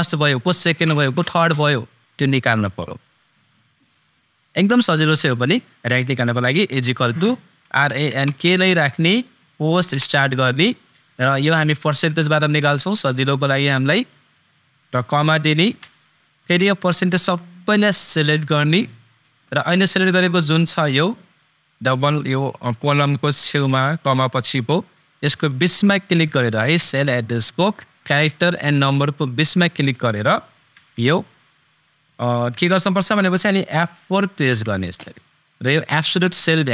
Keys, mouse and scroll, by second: 6.7 super+click, 6.8 super+=, 7.7 super+r, 8.2 super+n, 8.3 super+k, 9.8 shift+super+9, 12.7-15.7 super+drag, 15.7 super+,, 17.6-21.1 super+drag, 23.7 super+click, 30.2 ctrl+super+Num_Lock, 30.2 super+click, 30.7 ctrl+super+x, 32.5 ctrl+super+x, 34.4 super+F4.